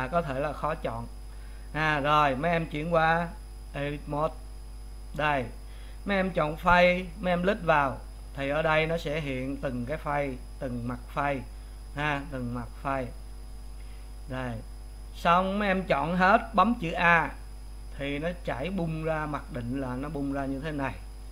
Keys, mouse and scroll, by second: 4.4 Tab, 6.8 3, 7.8 click, 9.9 click, 10.8 click, 11.3-12.4 middle drag, 12.4 click, 12.8 middle click, 13.6 click, 14.0-15.4 middle drag, 15.4 click, 17.0 a.